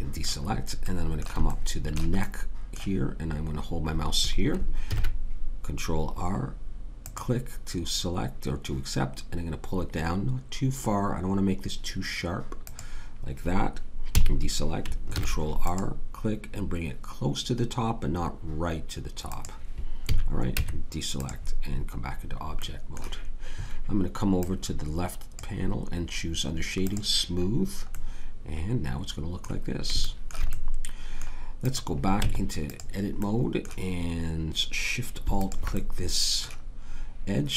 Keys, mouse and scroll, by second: 4.8 ctrl+r, 14.1 a, 15.1 ctrl+r, 20.0 a, 20.6 Tab, 27.5 click, 32.1 Tab.